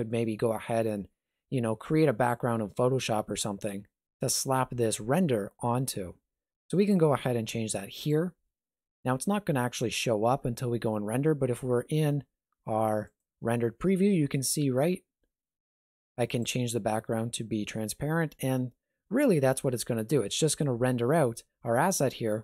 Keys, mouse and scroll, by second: 8.0 click, 13.1 click, 15.7 click.